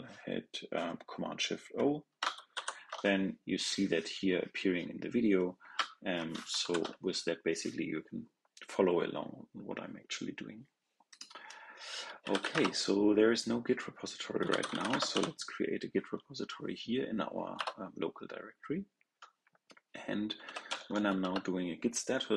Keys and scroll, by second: 2.4 shift+super+o, 6.5 shift+super+o.